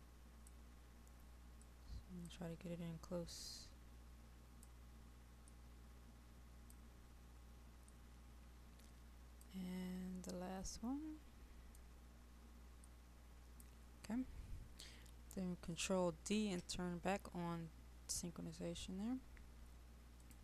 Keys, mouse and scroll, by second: 14.6-15.6 scroll up 1, 16.4 ctrl+d, 18.3 scroll up 1, 18.8-19.5 scroll down 1, 19.5-20.3 scroll up 1, 20.3 click.